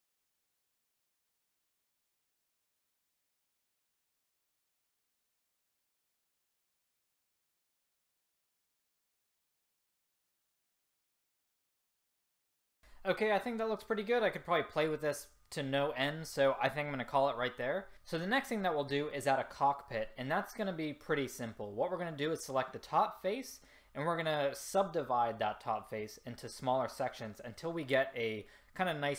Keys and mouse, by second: 0.6 middle click, 0.9 middle click, 3.0 s, 5.3-7.0 ctrl+z, 9.1 middle click, 9.6 ctrl+z, 9.8 click, 10.5 ctrl+z, 11.0 a, 12.6 a, 12.8 a.